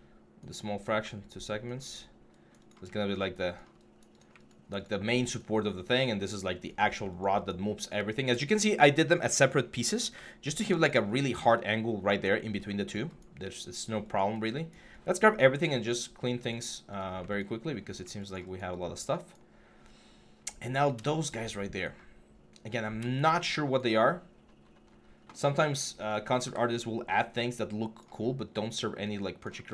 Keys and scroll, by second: 26.2 w.